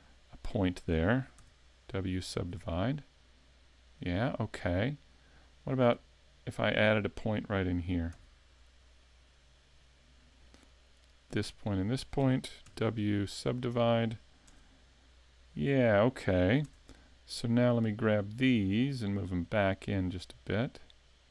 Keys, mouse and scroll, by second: 0.3 shift+right click, 1.4 w, 5.6 right click, 6.4 shift+right click, 8.1 w, 11.0 right click, 11.8 shift+right click, 12.6 w, 14.6 Tab, 16.7 Tab, 17.6 right click, 18.5 shift+right click, 19.4 click.